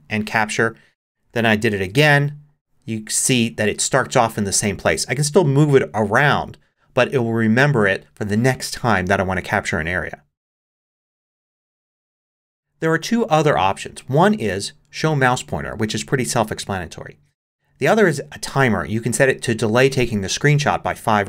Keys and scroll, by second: 1.7 typing.